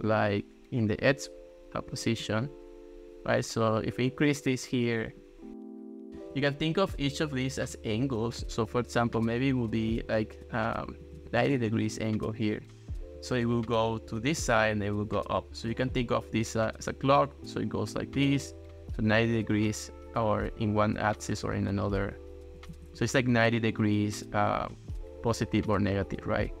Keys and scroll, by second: 1.9 1, 2.2 Return, 6.2 super+z, 7.3 ctrl+s, 10.8-11.7 typing, 16.0 ctrl+s, 22.8 ctrl+x, 23.0 ctrl+s.